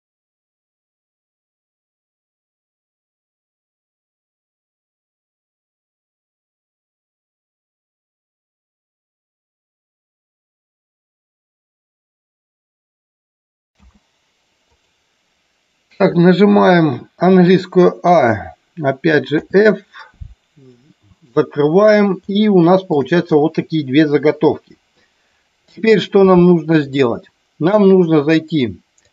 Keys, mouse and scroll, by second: 0.0-13.9 typing, 0.3 click, 0.7 click, 0.9 click, 2.6 click, 2.8 click, 3.5 click, 4.5 click, 4.9 click, 5.2 click, 5.6 click, 5.8 click, 6.1 click, 6.6 click, 6.8 click, 7.2 click, 7.8 click, 8.1 click, 8.9 click, 9.4 click, 10.7 click, 10.9 click, 11.4 click, 11.6 click, 12.2 click, 12.9 click, 13.1 click, 13.3 shift+middle click, 17.3 a, 19.4 f, 20.8 shift+middle click, 22.4 shift+middle click.